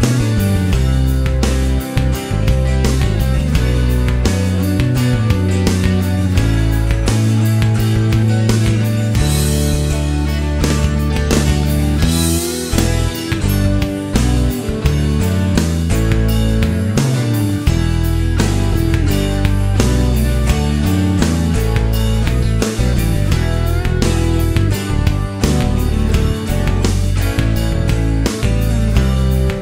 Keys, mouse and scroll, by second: 0.9 click, 2.2 click, 2.9 right click, 4.1 click, 5.0 click, 5.8 click, 7.1 shift+o, 7.8 shift+middle click, 9.5 click, 10.5 click, 11.0 shift+o, 13.4 click, 14.8 click, 15.3 shift+o, 17.0 click, 18.0 shift+click, 18.4 shift+o, 20.4-20.7 scroll up 1, 21.4 click, 22.6 click, 23.3 shift+o, 24.5 click, 25.8 click, 26.7 click, 27.4 shift+o, 28.6 middle click, 29.1 scroll down 2, 29.4 middle click.